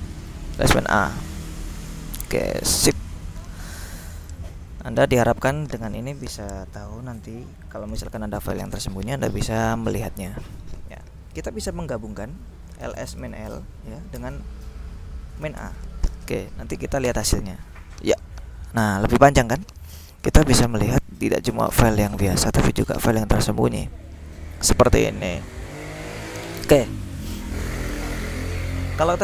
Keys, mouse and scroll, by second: 0.9 click, 1.2-2.3 drag, 2.6 click, 3.4-4.8 drag, 4.8-5.4 scroll up 2, 5.5-6.1 scroll up 2, 9.1-10.0 scroll up 2, 10.0-11.2 scroll down 2, 11.7 ctrl+l, 12.6-14.2 typing, 15.3-16.2 typing, 17.1 Return, 18.3-24.9 scroll up 5, 24.9-25.6 scroll down 2, 25.7-26.9 drag, 28.1 ctrl+l.